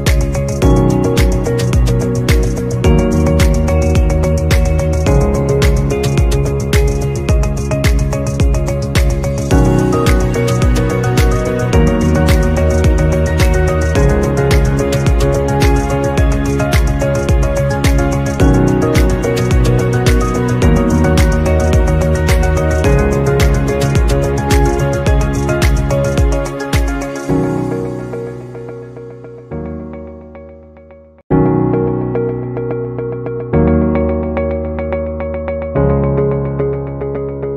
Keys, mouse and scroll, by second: 3.9 scroll down 1, 16.3 right click, 22.6 right click, 27.3 double click, 28.6 double click, 29.3 shift+click, 35.6 double click.